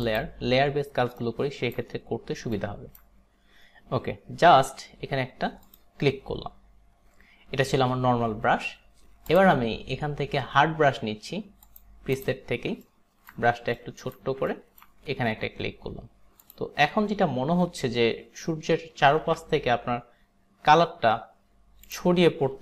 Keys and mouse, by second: 0.1 click, 1.3 alt+right click, 2.6 alt+right click, 5.7 click, 9.3 click, 11.7 click, 12.3 click, 12.9 alt+right click, 13.9 alt+right click, 14.6 alt+right click, 16.5 click, 19.2 ctrl+z, 21.9 click.